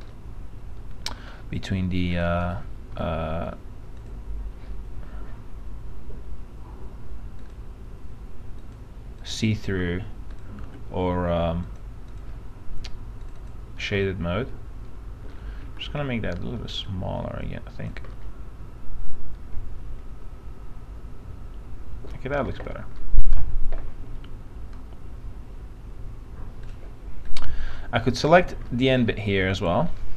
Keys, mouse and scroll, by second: 2.4 click, 3.4 alt+middle click, 4.2 click, 10.5 ctrl+click, 11.8 click, 14.6 alt+middle click, 15.8 alt+r, 17.0 click, 18.6-22.3 alt+middle drag, 22.7 alt+f, 23.1 middle click, 23.4-26.9 scroll down 1, 26.9 click, 28.0-30.1 middle drag.